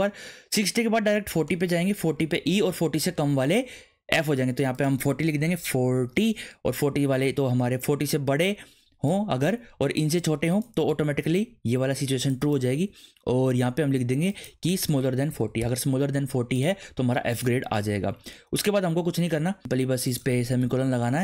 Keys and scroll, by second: 5.4 BackSpace, 5.9 4, 15.1 BackSpace, 15.6 shift+,, 17.7 ctrl+s, 20.6 ;.